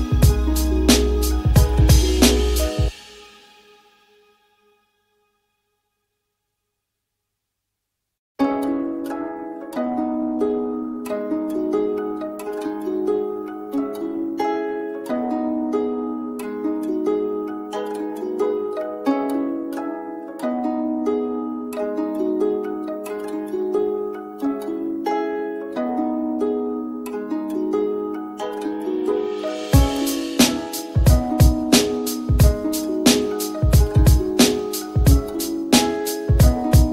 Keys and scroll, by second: 19.7 t.